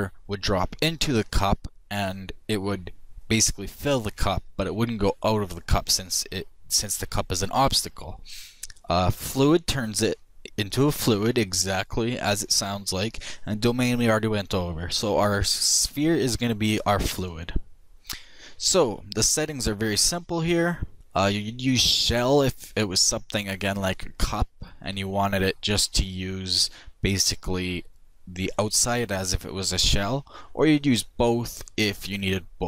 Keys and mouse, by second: 20.4 click.